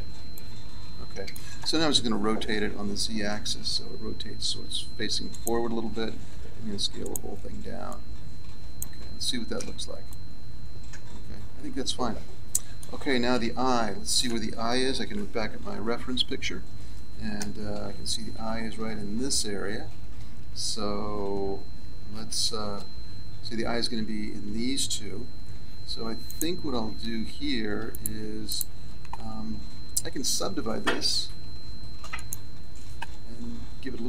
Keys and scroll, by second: 2.3 r, 6.1 s, 9.5 z, 15.7 KP_1, 16.1 KP_3, 17.3 z, 20.4 KP_1, 21.0 KP_3, 22.2 z, 26.9 a, 31.0 w.